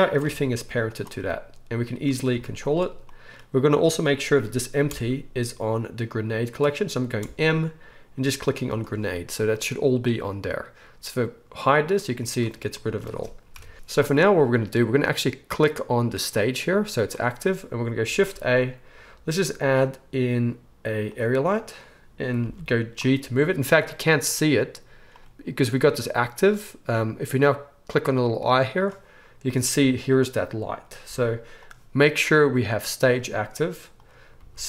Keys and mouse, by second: 0.2 g, 2.3 r, 4.9 m, 7.2 m, 11.5 click, 12.1 click, 12.2-23.4 middle drag, 13.5 KP_1, 13.7 alt+a, 18.1 shift+a, 22.4 g, 23.4-34.6 right drag, 28.4 click, 28.4 middle click, 31.0 g, 33.9 click, 33.9 middle click, 34.4 g.